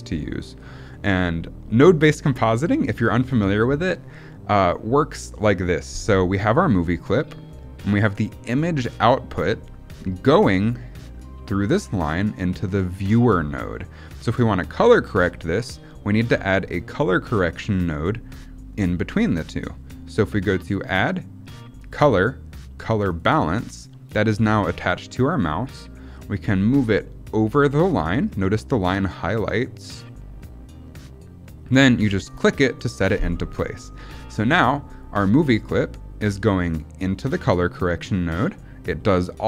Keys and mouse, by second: 20.6-32.3 drag.